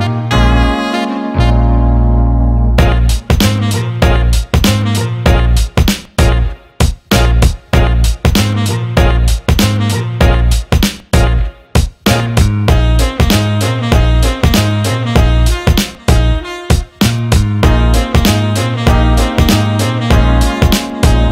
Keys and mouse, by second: 2.6 click, 4.1 shift+click, 5.7 shift+click, 7.9 shift+click, 8.8 shift+click, 10.0 ctrl+b, 16.8 click, 18.2 ctrl+x, 20.7 click.